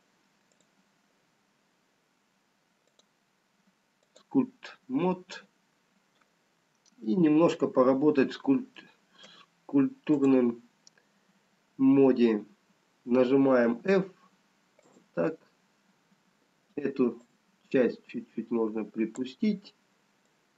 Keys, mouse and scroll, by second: 3.1 click, 9.1 middle click, 9.1 scroll down 2, 10.3 click, 12.5-13.5 scroll up 2, 13.8 f, 17.6 click.